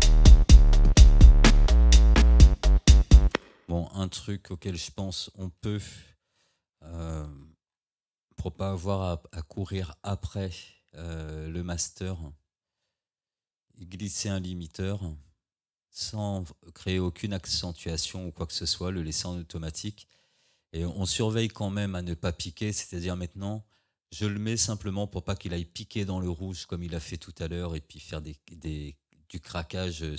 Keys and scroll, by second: 3.4 space.